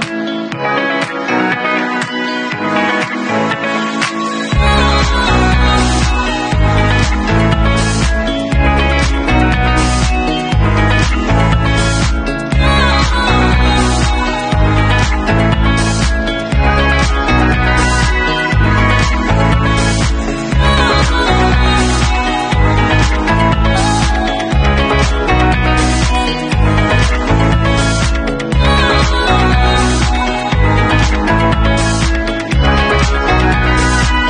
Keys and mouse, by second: 0.8 shift+middle click, 0.9 shift+right click, 0.9 shift+middle click, 1.2 shift+right click, 1.2 shift+middle click, 1.4 shift+click, 1.4 shift+middle click, 1.6 shift+click, 1.9 alt+shift+middle click, 2.1-13.1 alt+drag, 3.0 shift+q, 4.4 w, 8.3 shift+d, 13.1-15.6 middle drag, 14.0 p, 14.8 Tab, 15.6 click, 16.7 Tab, 17.3 a, 18.0 ctrl+e, 18.6-22.7 middle drag, 22.7-24.8 alt+drag, 24.5 Tab, 24.8-25.5 shift+middle drag, 25.5 shift+click, 25.5 shift+middle click, 26.1 shift+q, 26.5 click, 26.9 alt+middle click, 27.0-29.4 alt+drag, 28.9 Tab, 29.4 shift+middle click, 29.7 alt+shift+click, 30.0 shift+middle click, 30.7 shift+click, 30.8 ctrl+shift+middle click, 30.9 ctrl+click, 31.0 ctrl+middle click, 31.4-34.2 alt+drag.